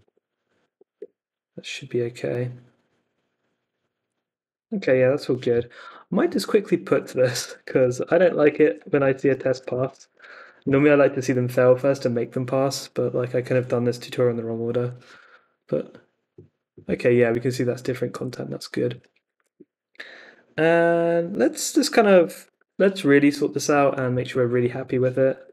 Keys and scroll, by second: 0.6 super+k, 0.9 Return, 4.8 super+Tab, 5.4 Escape, 7.4 super+c, 7.5-10.0 typing, 10.1 super+Tab, 10.4 Up, 10.6 Return, 18.0 super+Tab, 18.9 Escape, 19.1 d, 19.5 super+s, 22.1-23.1 typing, 24.8-25.5 typing.